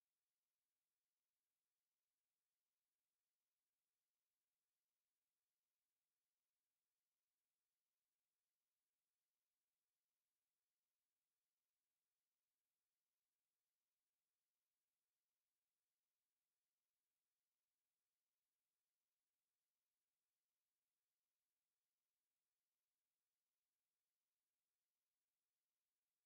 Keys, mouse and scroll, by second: 0.0-0.3 typing, 1.9 click, 5.6 click, 7.1-9.0 drag, 13.6 click, 16.1 click, 18.0-20.8 drag, 23.4-25.6 drag.